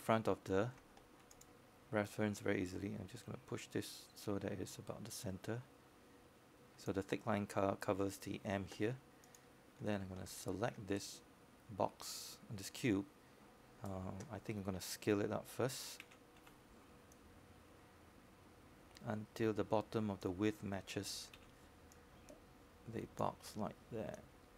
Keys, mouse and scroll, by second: 0.0 scroll up 1, 0.4 alt+middle click, 1.3 alt+middle click, 3.1-4.3 scroll down 1, 4.6 alt+middle click, 4.9-10.6 drag, 13.5 scroll up 1, 13.9 alt+middle click, 14.7-18.6 right drag, 19.9 e.